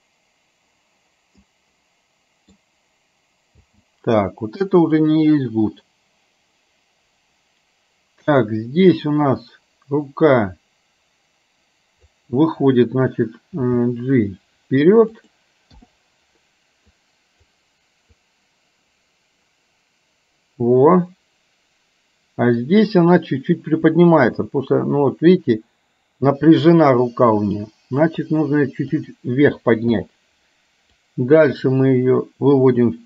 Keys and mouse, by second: 1.6-2.8 middle drag, 3.7 space, 4.7-12.2 drag, 13.6 g, 15.8 i, 17.1 click, 18.3-23.1 drag, 24.3 g, 30.0 i, 31.1-33.0 drag.